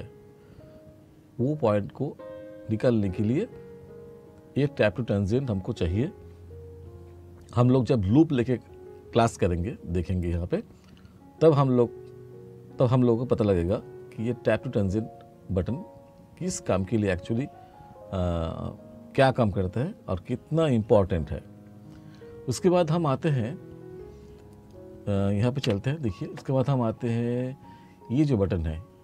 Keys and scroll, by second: 25.7 e.